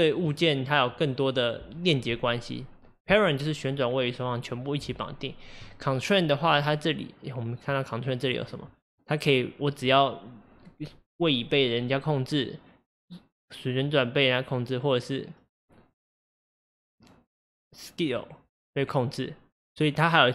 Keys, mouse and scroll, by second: 8.2-11.3 drag.